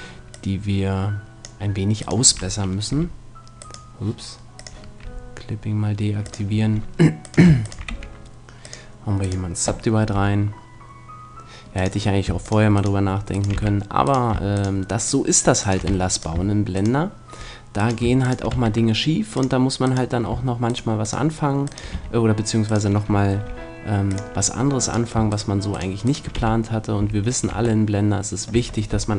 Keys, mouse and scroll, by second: 2.0-3.8 right drag, 2.9 g, 4.6-8.4 drag, 5.0 g, 7.2-9.4 right drag, 7.9 w, 10.0 g, 10.9 right click, 12.0-13.8 drag, 12.4-16.7 right drag, 13.6 f, 15.8 f, 18.5 w, 21.9 f, 22.6 right click, 23.4 g, 24.5 click, 26.1-27.8 right drag, 26.4 f, 27.0 a, 27.5 Tab, 28.5 Tab.